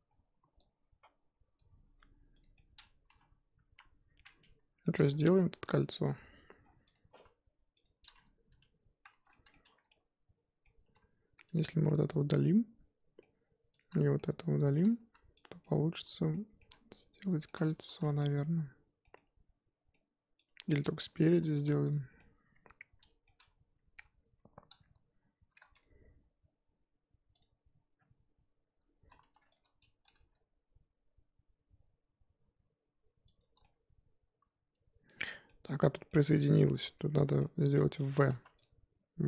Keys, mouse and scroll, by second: 1.9 scroll up 4, 2.4 click, 2.5-3.6 middle drag, 3.6 KP_1, 4.0-4.8 scroll up 2, 4.8 shift+middle drag, 5.1 Tab, 5.6 z, 6.0 z, 6.2 Tab, 6.6-6.9 scroll down 4, 6.9 click, 7.2 z, 7.8 click, 9.1 shift+h, 9.3-9.6 middle drag, 9.6 Tab, 9.9-10.8 middle drag, 10.8 3, 11.5 click, 11.9-13.8 middle drag, 13.8 shift+click, 13.9-14.7 middle drag, 14.7 shift+click, 15.4 x, 15.6-17.8 middle drag, 17.8 ctrl+z, 18.2-20.4 middle drag, 20.4 click, 21.9 x, 22.2-23.9 middle drag, 23.9 KP_1, 24.4-25.6 scroll up 2, 25.6 Tab, 25.7 click, 28.7 Tab, 29.2 2, 29.5 click, 30.1 g, 33.6-36.7 middle drag, 36.7 ctrl+z, 37.1-38.3 middle drag, 38.3 1, 38.5 click.